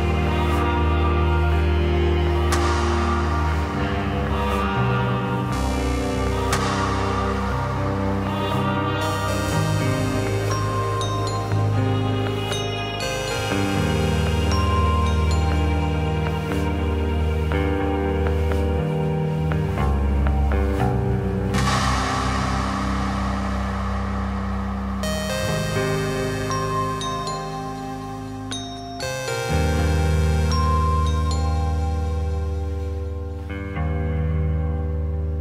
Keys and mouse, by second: 0.4 click, 1.6-2.0 shift+middle drag, 2.8 middle click, 5.3 s, 6.6-7.8 middle drag, 15.2 middle click, 16.4-16.8 shift+middle drag, 17.2 middle drag, 28.0 shift+a.